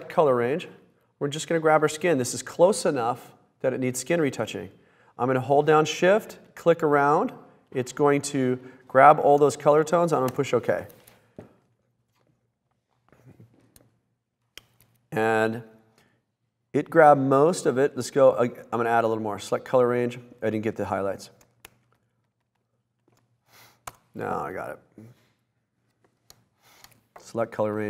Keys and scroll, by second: 10.4 Return, 24.0 Return, 26.7 super+d.